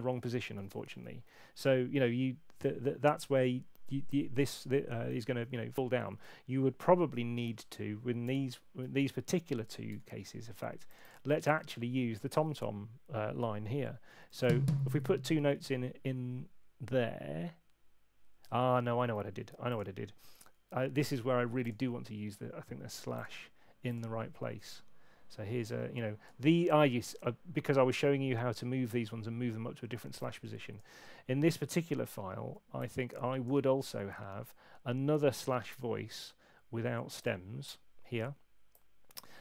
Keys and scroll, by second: 0.6 super+8, 2.8 super+8, 6.2 alt+shift+Up, 8.3 Return, 9.0 ↺, 9.9 Delete, 14.3 y, 18.6 super+z, 18.7 super+z, 18.9 super+z, 19.0 super+z.